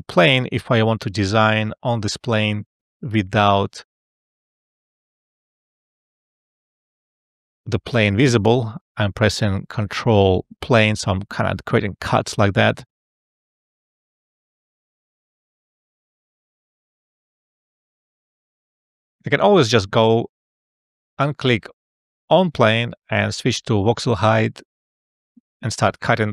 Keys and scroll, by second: 7.3 ], 24.5 e, 25.9 space.